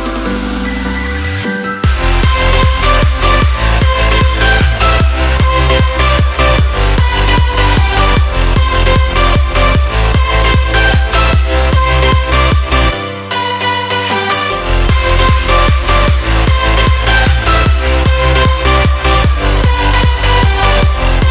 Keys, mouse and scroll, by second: 0.7 click, 3.6-9.8 drag, 10.6 click, 12.9 click, 14.7-16.8 drag, 19.2-21.3 drag.